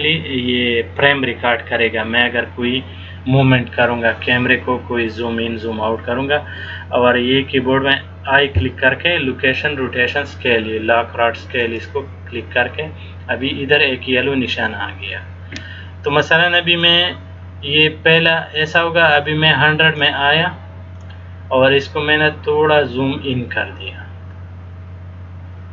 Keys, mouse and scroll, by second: 8.5 i, 17.0 click, 22.4-23.2 scroll down 2, 23.4-23.9 scroll down 1, 24.1-24.7 scroll down 2.